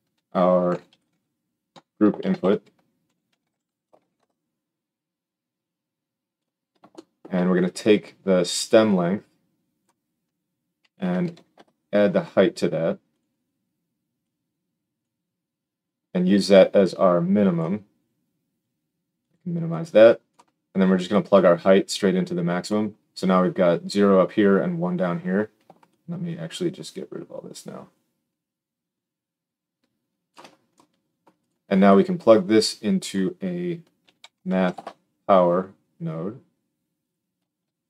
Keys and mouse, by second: 2.1 shift+a, 6.8-8.8 shift+drag, 11.3 d, 13.1-14.1 drag, 19.3-19.6 drag, 31.4-32.5 drag, 37.0-37.8 drag.